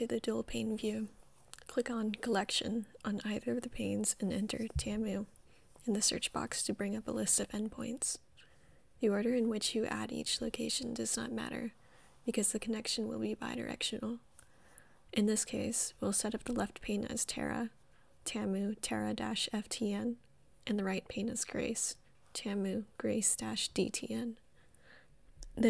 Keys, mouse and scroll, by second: 0.0 click, 5.7-7.1 typing, 15.0 click, 17.1 click, 17.8-19.1 typing, 20.3 click, 23.1 click.